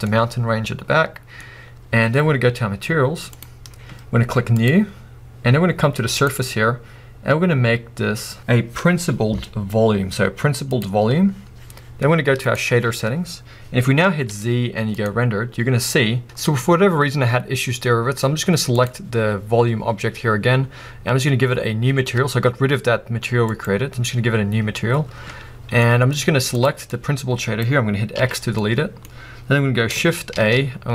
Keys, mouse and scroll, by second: 4.7-10.8 drag, 12.5 click, 13.3-13.7 scroll down 1, 13.9 scroll up 1, 15.1 z, 16.2-18.9 middle drag, 16.4-17.2 scroll up 2, 17.2-18.9 scroll down 2, 18.9 click, 19.6-20.0 scroll up 1, 23.7-28.2 drag, 28.2 x, 30.3-30.9 middle drag, 30.3-30.9 scroll up 2.